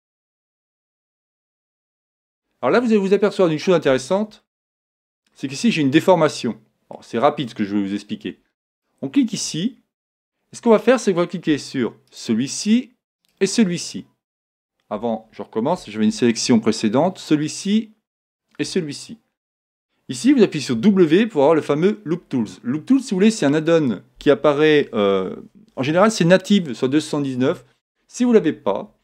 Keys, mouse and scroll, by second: 0.9-2.5 middle drag, 2.8-7.5 middle drag, 8.2 Tab, 8.8-10.6 right drag, 9.3 Tab, 9.7-11.7 middle drag, 12.1-15.1 right drag, 14.0-15.8 middle drag, 14.9 a, 17.2-20.1 right drag, 19.9 middle click, 20.7 w.